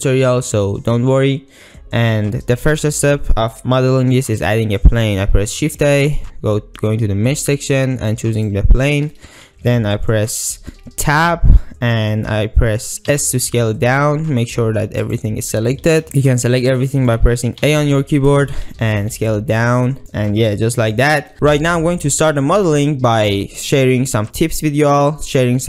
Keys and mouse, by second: 5.5 shift+a, 10.1-10.7 ctrl+drag, 11.4 Tab, 13.2 s, 15.1 click, 15.9 KP_Decimal, 16.1 a, 16.2 click, 16.7 ctrl+click, 17.7 a, 19.1 s, 20.0 shift+click, 20.5 ctrl+drag.